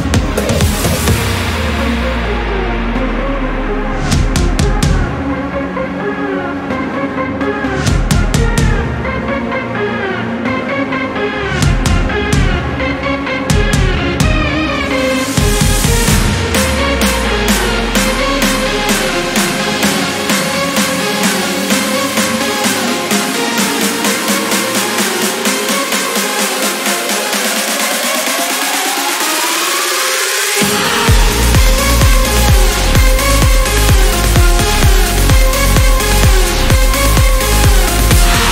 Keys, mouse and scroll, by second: 3.4 click, 6.6 click, 9.4 click, 12.4 click, 15.0 click, 16.6 click, 22.3 click, 23.7 click, 24.7 click, 26.7 click, 27.8 1, 29.1 0, 29.8 click, 31.2 5, 33.0 click, 36.2-38.5 drag.